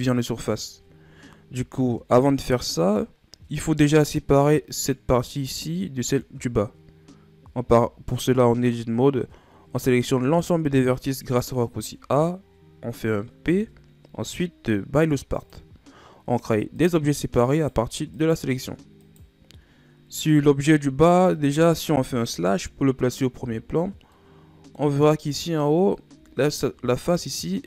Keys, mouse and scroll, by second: 4.1 middle click, 4.6-5.3 scroll up 2, 5.3 right click, 5.8-7.6 middle drag, 7.6 Tab, 10.1 a, 13.4 p, 16.3 Tab, 16.7 right click, 17.5-19.9 right drag, 19.9 scroll down 1, 22.3 KP_Divide, 23.7-24.1 scroll down 4, 24.1 middle click, 25.0 scroll up 2, 26.3 scroll up 2, 27.1-27.6 middle drag.